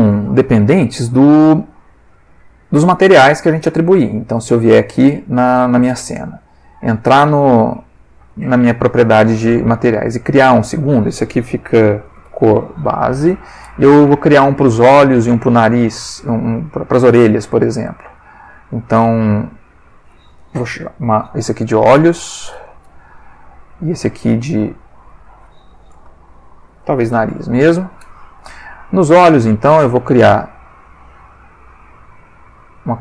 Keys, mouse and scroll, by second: 4.4 click, 5.5 ctrl+click, 6.2 Tab, 7.3 ctrl+Tab, 8.3 click, 10.7 click, 11.9-13.1 typing, 13.2 shift+Return, 18.2 click, 19.2 click, 19.9 click, 20.7 shift+o, 21.9 l, 22.1 h, 22.2 s, 23.9 click, 24.7 click, 25.2 click, 26.7-27.4 typing, 27.6 shift+Return, 28.9 click, 29.9 click, 30.8 click.